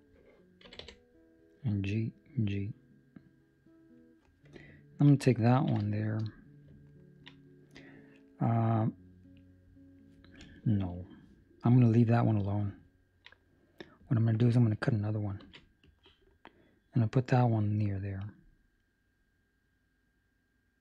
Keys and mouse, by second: 0.6 g, 4.8 alt+right click, 5.4 ctrl+middle click, 6.0 shift+middle click, 6.8 ctrl+middle click, 12.8 ctrl+middle click, 15.3 ctrl+r.